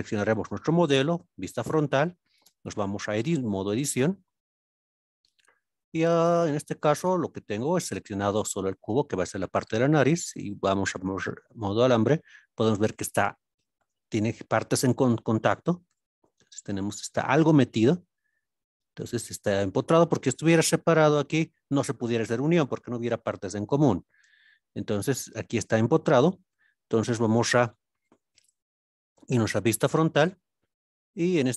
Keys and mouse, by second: 0.3 KP_Decimal, 1.1 KP_1, 2.4 Tab, 6.0 click, 7.5 shift+middle click, 8.6-9.6 middle drag, 11.7-12.8 middle drag, 15.2 middle click, 15.8 KP_3, 17.7 KP_Decimal, 20.4 g, 20.8 y, 24.0 right click, 25.0-26.0 middle drag, 28.1 alt+z, 29.2 KP_1, 29.8 alt+z, 31.4 click.